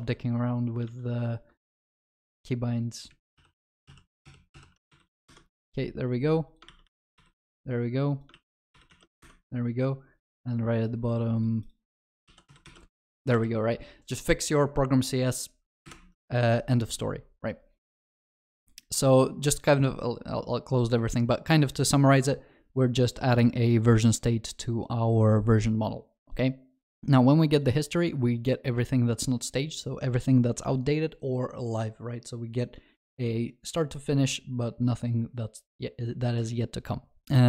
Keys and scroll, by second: 3.3 alt+j, 5.2 ctrl+v, 6.6 ctrl+w, 7.1 ctrl+v, 8.7 ctrl+v, 12.1 ctrl+w, 12.4 ctrl+v, 12.6 ctrl+s, 13.0 ctrl+alt+shift+l.